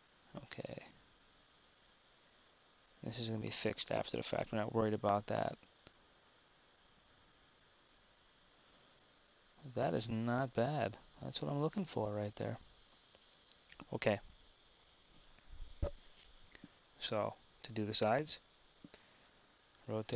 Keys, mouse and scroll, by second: 6.4 Tab.